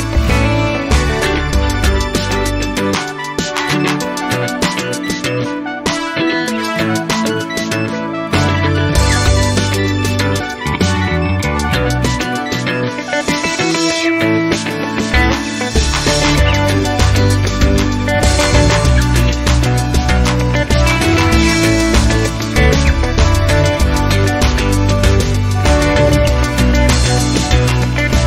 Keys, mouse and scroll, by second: 1.0 space, 1.6 scroll down 1, 2.1 click, 5.0 click, 5.7 right click, 6.7 click, 7.9 click, 9.1 click, 9.7 click, 10.9-11.2 scroll down 2, 11.8 click, 13.7 0, 14.5-14.8 scroll up 2, 16.3 scroll up 2, 16.9 scroll down 2, 17.4 click, 19.5 0, 20.3 scroll down 2, 20.7 scroll up 2, 22.7 click, 23.5 click, 25.2 click, 26.2-27.2 typing.